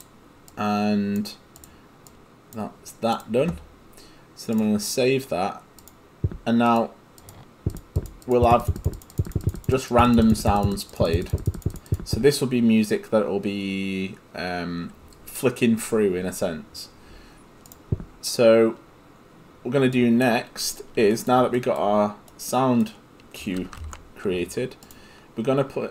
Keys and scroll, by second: 23.8 ctrl+space.